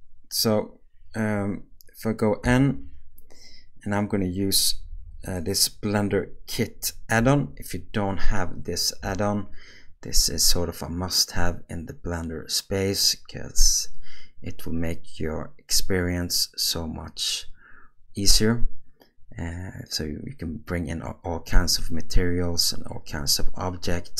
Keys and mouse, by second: 2.4 n.